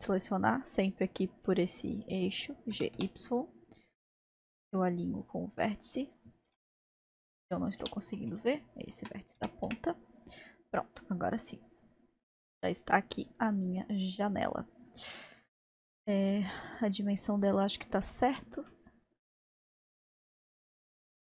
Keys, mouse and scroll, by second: 0.0 click, 2.7 g, 8.4-9.4 shift+middle drag, 9.4 g, 11.0-14.0 middle drag, 14.6-15.6 scroll down 1, 15.6-16.6 scroll down 1, 16.6-18.1 middle drag, 18.1-18.7 scroll up 1, 18.7-19.9 middle drag, 20.0-21.3 drag.